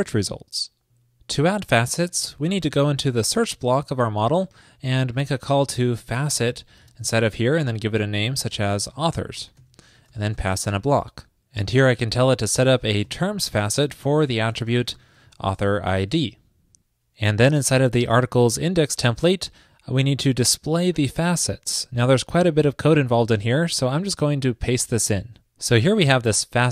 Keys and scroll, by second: 16.1 super+s, 24.2 super+v, 25.0 super+s.